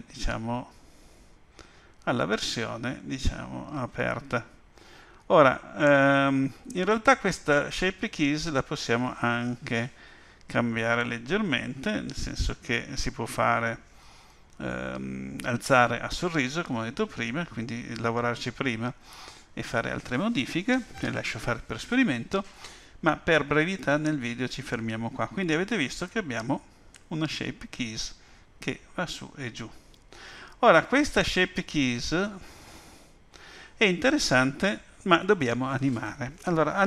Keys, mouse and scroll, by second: 26.9 click.